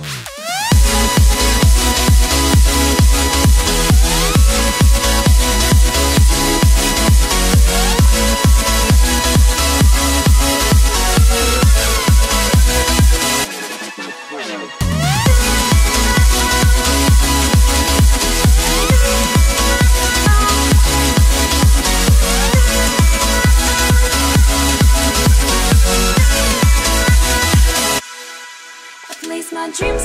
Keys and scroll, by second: 28.4 ctrl+t.